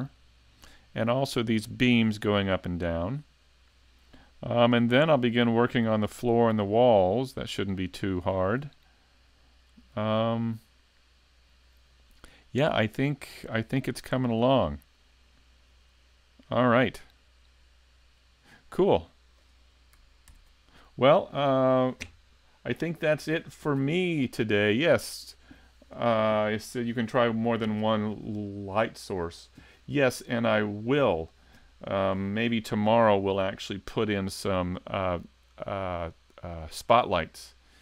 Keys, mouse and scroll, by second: 20.3 ctrl+Up, 20.3-20.9 scroll down 2.